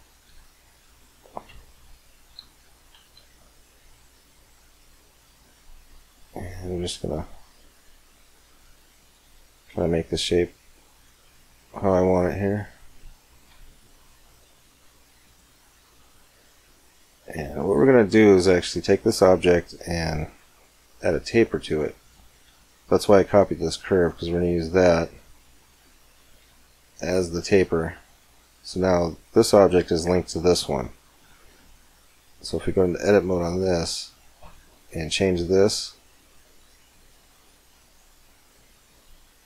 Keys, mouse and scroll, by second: 0.1 e, 1.4-6.5 middle drag, 6.5 click, 6.9-8.8 right drag, 7.4 r, 9.0-10.7 middle drag, 9.9 g, 10.7 click, 11.9-13.4 right drag, 12.4-13.4 middle drag, 13.3 e, 15.5-20.2 middle drag, 16.4 Tab, 21.8-23.6 drag, 26.2-29.9 middle drag, 30.5-32.2 right drag, 31.1 Tab, 32.4-34.3 right drag, 33.3 r, 34.9 g, 37.1-38.9 right drag, 37.5 g.